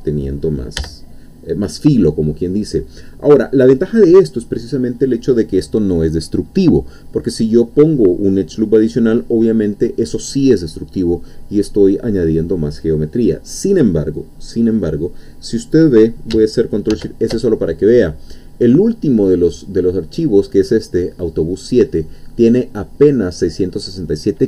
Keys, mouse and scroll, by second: 0.8 n, 16.9 ctrl+shift+s.